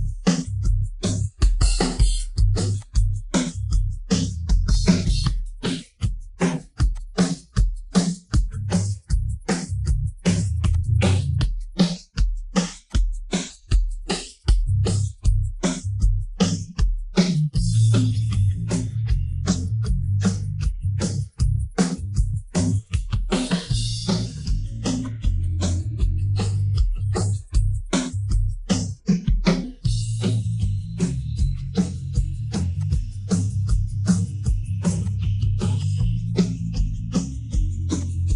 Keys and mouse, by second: 0.8 shift+middle drag, 1.4 shift+middle click, 1.5 shift+click, 2.1 Tab, 2.7-3.8 drag, 4.7-5.7 drag, 6.1 Tab, 6.9-9.5 drag, 10.2 Tab, 10.7-11.8 drag, 12.2 Tab, 12.9-13.9 drag, 14.1 middle drag, 14.7 middle click, 15.2-15.6 middle drag, 16.5-19.9 middle drag, 21.3-22.8 middle drag, 23.1 middle drag, 25.1-25.5 middle drag, 27.2-28.2 drag, 28.5 middle click, 29.5-30.2 shift+d, 31.0 KP_1, 31.9 KP_3, 32.7-33.4 drag, 34.1 shift+middle click, 35.0 click, 35.8 click, 37.9 click.